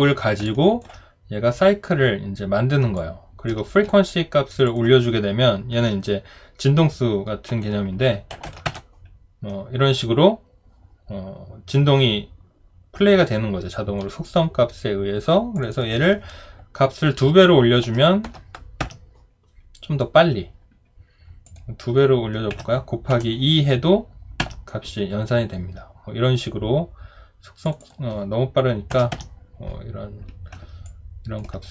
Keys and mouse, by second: 0.4 alt+click, 2.9 alt+click, 8.4-9.2 typing, 18.8 Return, 24.4 Return, 29.1 Return, 30.8 alt+click.